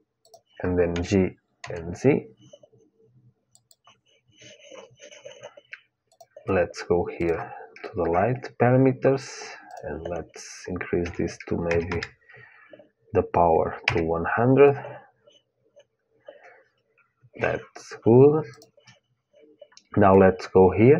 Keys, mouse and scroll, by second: 0.7 g, 6.1-8.9 drag, 9.4-11.4 drag, 11.6 KP_0, 18.2-20.2 drag.